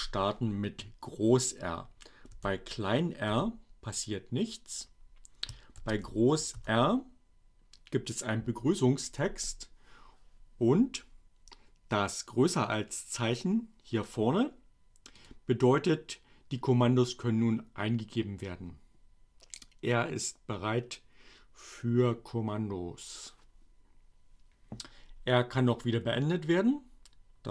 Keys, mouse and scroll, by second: 2.2 r, 2.7 Return, 4.8 shift+r, 12.4 click, 14.9 click.